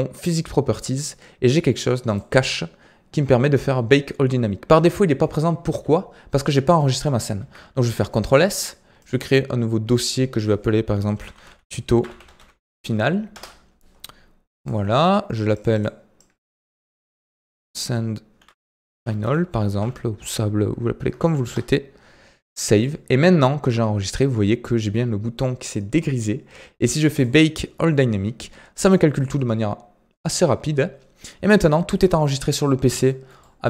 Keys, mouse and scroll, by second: 2.0-2.4 drag, 2.4-6.0 scroll down 15, 7.3 ctrl+s, 27.1-30.8 drag, 31.2-31.6 scroll down 3, 31.6-32.0 middle drag, 32.0-32.6 scroll up 3, 32.6-33.0 scroll up 1, 33.0-33.6 middle drag.